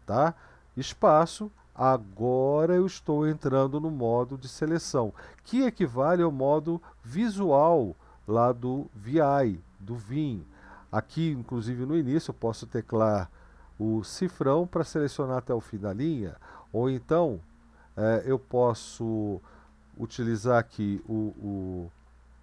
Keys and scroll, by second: 0.8 space, 2.4 Right, 2.6 Right, 2.7 Right, 2.9 Right, 3.1-4.7 Right, 5.6-7.2 Right, 7.9 Down, 8.3 Up, 8.7 Up, 9.2 End, 10.5 Down, 10.9 Up, 14.1 shift+4, 16.9 Right, 17.4 Left, 17.7 Left, 18.4 typing, 20.9 typing.